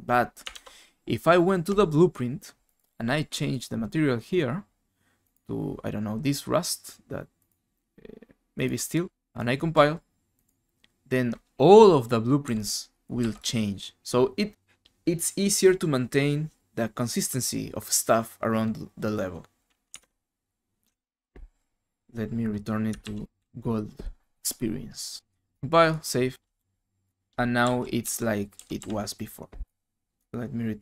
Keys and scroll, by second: 0.5 alt+Tab, 12.4-13.7 typing, 20.0 alt+Tab, 20.8 alt+Tab, 23.0 ctrl+z, 23.3 ctrl+z, 27.6-28.8 typing.